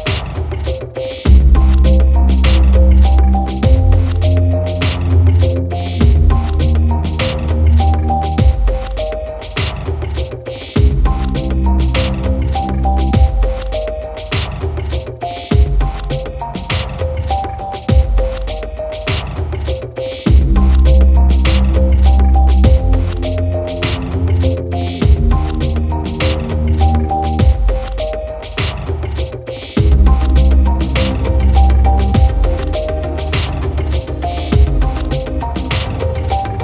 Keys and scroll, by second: 8.0 ctrl+=.